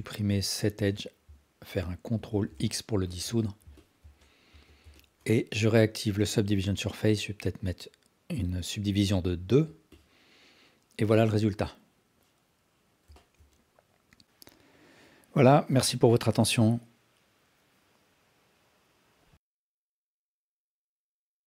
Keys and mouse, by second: 2.1 ctrl+x, 2.8 alt+shift+click, 3.2 alt+shift+click, 3.5 alt+click, 3.9 ctrl+alt+click, 4.5 Tab, 4.9 alt+click, 9.0 click, 9.9-13.0 alt+drag, 13.1 alt+shift+drag, 13.5-16.3 alt+drag, 17.0 alt+click, 18.6-20.4 alt+drag.